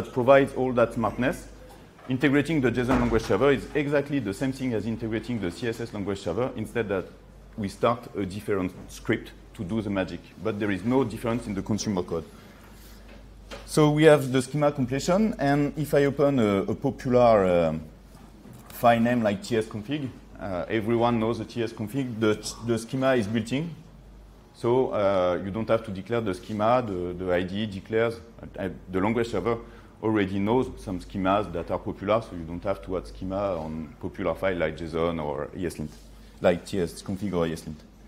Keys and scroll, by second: 16.2 ctrl+3.